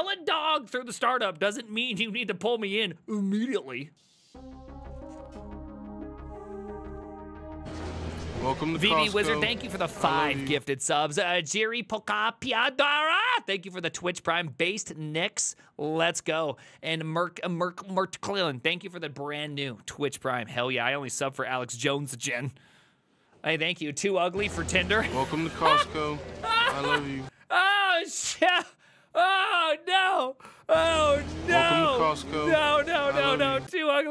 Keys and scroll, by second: 9.1 alt+f, 19.6 alt+f, 20.5 alt+l.